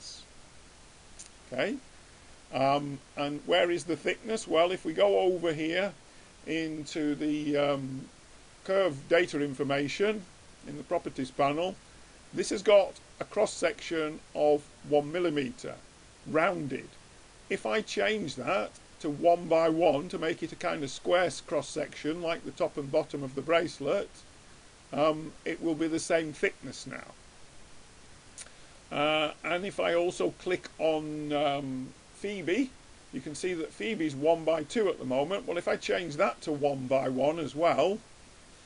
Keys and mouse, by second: 0.2 middle click, 0.4 click, 0.5 middle click, 0.6-1.8 middle drag, 2.0-3.9 middle drag, 4.2-6.0 drag, 6.3-8.1 drag, 16.6-18.3 drag, 24.4-26.4 middle drag, 26.6 middle click, 27.2 middle click, 28.2 middle click, 30.8-32.8 drag, 32.8-34.2 middle drag, 34.8-36.7 drag.